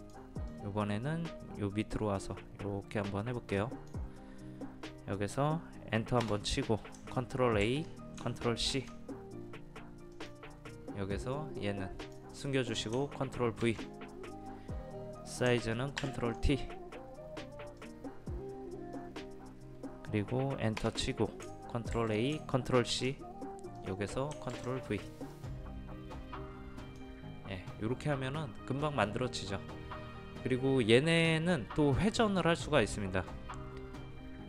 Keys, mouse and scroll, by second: 6.2 Return, 7.7 ctrl+a, 8.7 ctrl+c, 10.2 click, 13.6 ctrl+v, 16.0 ctrl+t, 17.8-19.9 drag, 20.8 Return, 21.9 ctrl+a, 22.9 ctrl+c, 23.7 click, 24.5 ctrl+v, 25.3-27.9 drag.